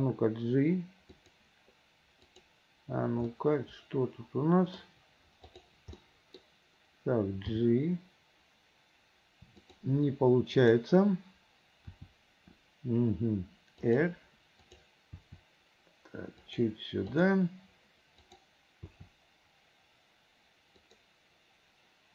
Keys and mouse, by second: 2.4 click, 3.4-4.9 middle drag, 5.6 click, 6.1 middle click, 7.6 g, 10.7 click, 12.0 r, 15.3 r, 17.3 click, 18.3 click, 19.0 r.